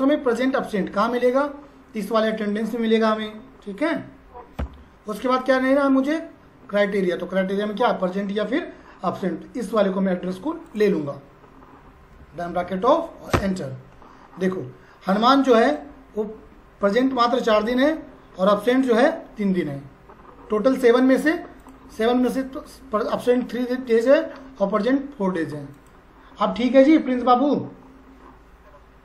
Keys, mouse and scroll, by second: 2.3 click, 10.7 click, 15.6 click, 20.8 click.